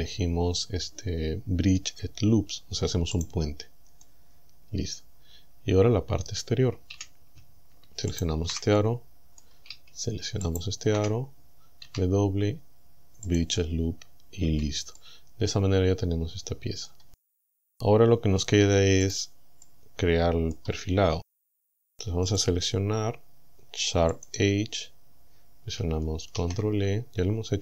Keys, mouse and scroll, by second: 3.2 click, 4.0-6.5 middle drag, 7.0 a, 8.2 alt+shift+right click, 8.8 middle click, 10.5 alt+shift+right click, 11.9 w, 13.3 click, 14.5 a, 15.0-17.1 middle drag, 17.3-17.7 scroll down 2, 19.1 click, 19.6 middle click, 20.6 scroll down 1, 22.3 click, 24.2 click, 26.4 ctrl+e.